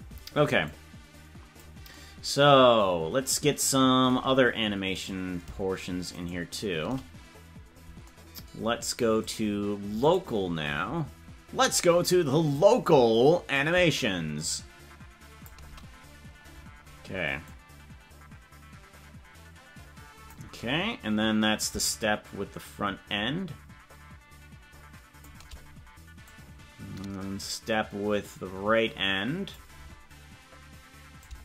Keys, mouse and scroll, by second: 0.8-1.9 drag, 5.3 right click, 9.2-10.4 drag, 13.5-15.5 drag, 17.6-20.4 drag, 21.7-25.3 shift+drag, 26.4-29.7 drag, 31.2-31.4 drag.